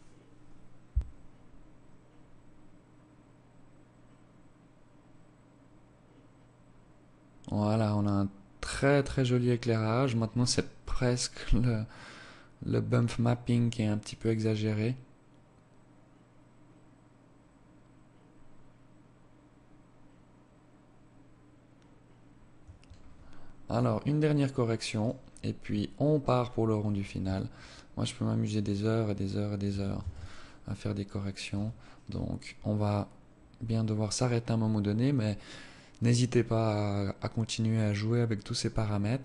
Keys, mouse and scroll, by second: 21.4 Escape, 22.5 click, 23.9 right click, 24.5-25.7 scroll down 12, 26.5 shift+click, 28.8 ctrl+s.